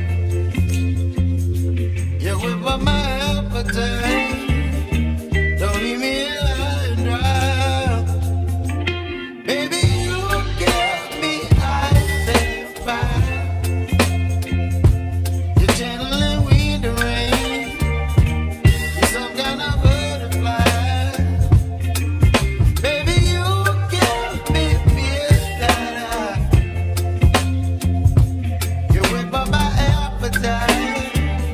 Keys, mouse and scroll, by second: 0.6 r, 2.3-3.0 scroll up 5, 3.0-4.3 shift+middle drag, 4.3 g, 7.1 g, 12.3-13.4 middle drag, 15.1-15.7 scroll down 5, 15.7-16.9 shift+middle drag, 16.9 g, 23.0 shift+d, 25.3 ctrl+z, 28.2-31.5 drag.